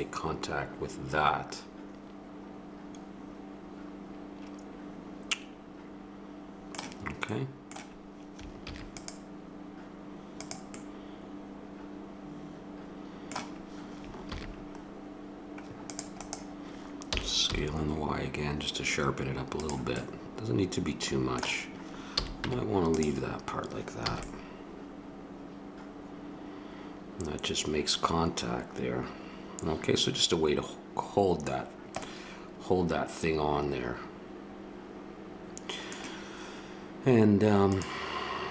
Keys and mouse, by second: 0.0 middle click, 0.2 click, 0.4 middle click, 0.7 click, 0.9 middle click, 1.0 click, 1.1 middle click, 1.2 click, 2.5 middle click, 5.5 middle click, 7.3 middle click, 8.6 ctrl+r, 10.8 middle click, 14.3 ctrl+r, 17.1 s, 20.0 middle click, 20.2 middle click, 20.4 middle click, 22.1 a, 22.4 Tab, 23.2 middle click, 24.1 click, 24.1 a, 24.2-25.0 middle drag, 25.1-25.8 middle drag, 25.9 middle drag, 28.5 middle click, 31.5-34.0 middle drag, 35.2 middle drag, 36.3-37.7 middle drag, 37.7-38.3 right drag, 38.3-38.5 drag.